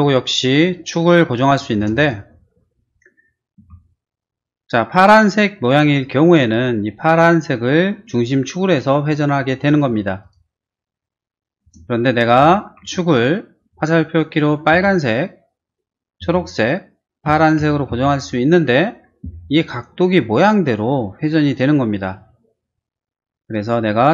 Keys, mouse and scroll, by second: 0.2 click, 1.7 space, 2.0 click, 3.6 q, 9.6 click, 10.2 click, 11.6 space, 12.8 q, 14.7 Right, 16.2 Left, 17.2 Up, 17.6 Right, 17.9 Left, 20.2 middle click, 22.2 middle click.